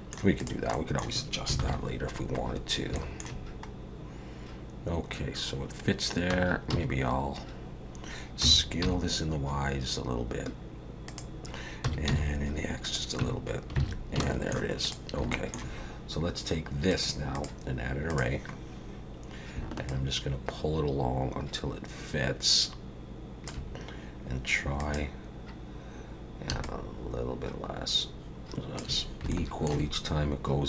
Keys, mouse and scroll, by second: 0.4 click, 0.7 middle click, 1.6 ctrl+KP_7, 2.6 scroll down 1, 2.9 shift+middle click, 6.3 Tab, 6.7 a, 8.4 s, 11.8 s, 13.2 Tab, 13.5 scroll down 1, 13.8 alt+a, 14.2 shift+middle click, 14.8 click, 15.3 shift+middle click, 16.9 click, 17.3 click, 19.9 shift+click, 24.8 click, 26.6 shift+click, 29.3 shift+middle click.